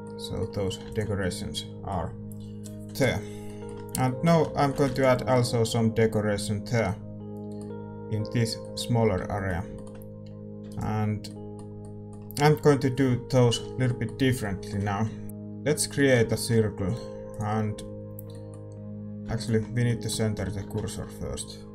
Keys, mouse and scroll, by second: 1.1 ctrl+s, 4.0-5.3 middle drag, 5.3 ctrl+s, 8.5-17.3 middle drag, 9.2 Tab, 10.6 a, 10.6-13.8 right drag, 15.2 Tab, 17.3 shift+a, 17.7-21.7 middle drag, 19.4 x.